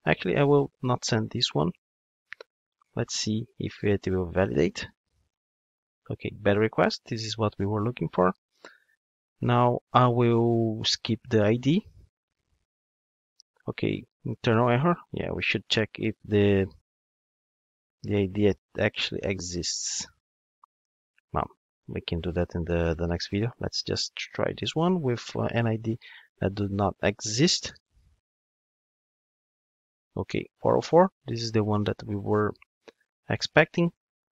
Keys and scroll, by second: 21.5 ctrl+Tab.